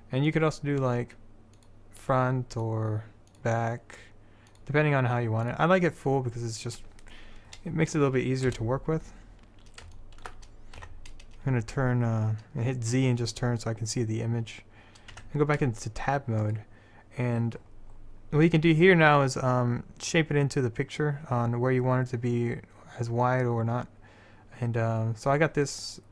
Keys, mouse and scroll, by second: 8.6 KP_7, 10.9 z, 13.7 middle click, 15.3 Tab, 18.2-20.1 middle drag, 25.4-26.1 right drag.